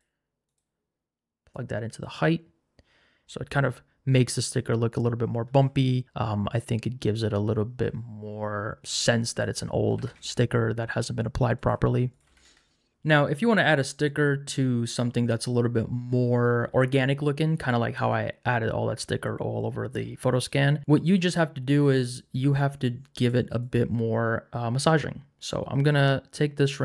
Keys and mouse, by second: 0.5 click, 1.5 click, 3.5-6.0 drag, 8.6-9.8 drag, 14.0 click, 23.2 click, 26.5 click.